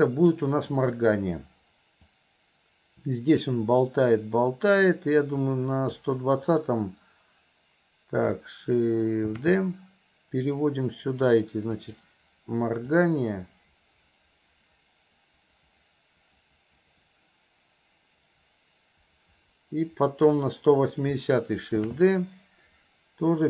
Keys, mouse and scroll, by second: 2.2-6.1 drag, 13.0-20.4 drag.